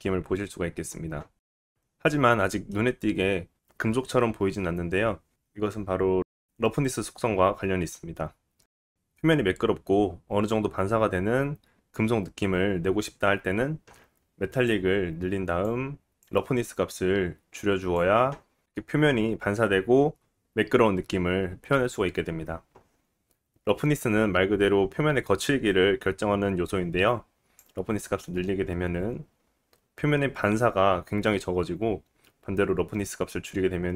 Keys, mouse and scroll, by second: 18.8 middle click, 20.4 middle click.